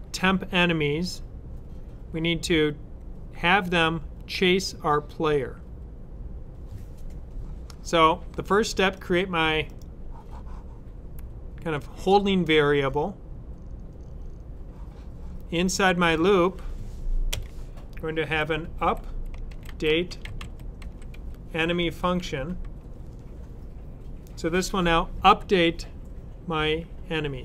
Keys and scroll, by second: 18.0-22.6 typing.